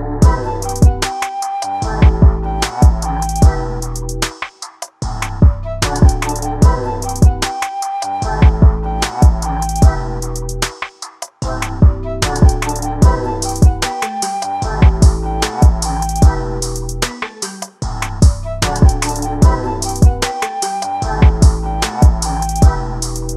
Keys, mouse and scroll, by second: 0.0 ctrl+space, 1.3-1.7 scroll down 4, 2.1 scroll down 4, 2.3-2.6 scroll up 7, 3.5 ctrl+shift+click, 3.8 scroll down 1, 4.0-5.3 shift+middle drag, 5.3-11.1 drag, 11.8-16.0 drag, 18.2 scroll down 4, 18.4-18.7 scroll up 7, 18.9 scroll down 5, 19.0 shift+middle click, 19.3 alt+a, 21.3 click, 21.5 scroll up 3, 21.7-22.3 scroll down 1, 22.3 click, 22.6 scroll down 1, 22.7-23.0 scroll up 7, 23.0 shift+middle click.